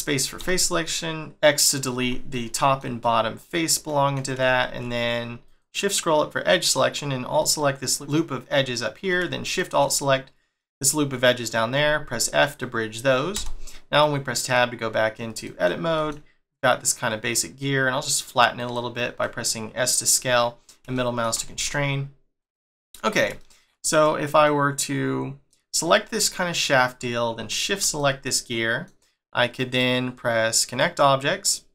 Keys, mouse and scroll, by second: 0.4 x, 0.8 middle click, 1.5 click, 2.0 x, 2.3 middle click, 3.0 middle click, 4.5-5.4 shift+scroll up 4, 5.4 alt+click, 5.6 middle click, 6.7-7.4 scroll up 3, 7.4 shift+middle click, 9.4 alt+shift+click, 9.8 middle click, 11.7 f, 12.1 middle click, 13.3 Tab, 13.6 scroll down 3, 14.0 middle click, 15.4 middle click, 15.9 s, 19.2 middle click, 20.3 middle click, 20.9 shift+middle click, 21.5 g, 22.7-23.3 scroll down 2, 23.3 shift+middle click, 23.9 click, 24.4 middle click, 27.5 shift+click, 27.9 middle click, 30.6 click, 31.5 middle click.